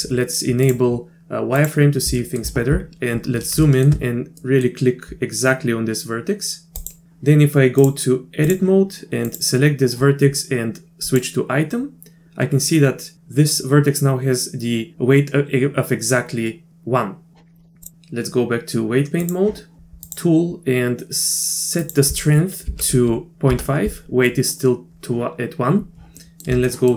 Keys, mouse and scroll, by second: 0.6-1.9 drag, 2.2 shift+middle click, 3.6 shift+middle click, 4.4 middle click, 6.8 click, 7.8-8.5 drag, 9.3 click, 11.1 click, 17.8-19.3 drag, 20.1 click, 21.9-24.0 drag, 26.3 middle click, 26.7 shift+middle click.